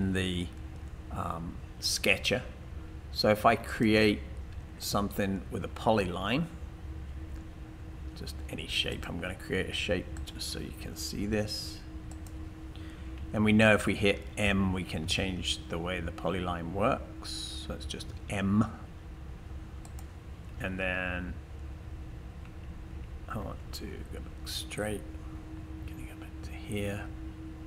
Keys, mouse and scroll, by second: 4.8 click, 13.8-15.0 typing, 22.5-23.3 typing.